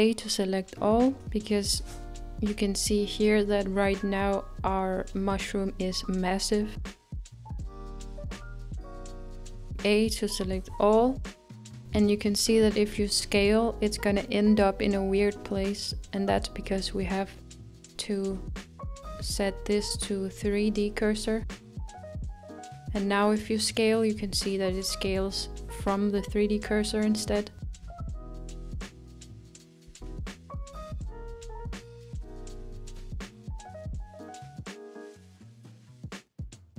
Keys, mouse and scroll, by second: 1.5-1.9 scroll up 2, 2.8 click, 7.9 a, 21.7-24.9 drag, 24.9 s, 33.9-35.1 scroll up 5, 35.1-35.8 shift+middle drag, 35.8 scroll up 3.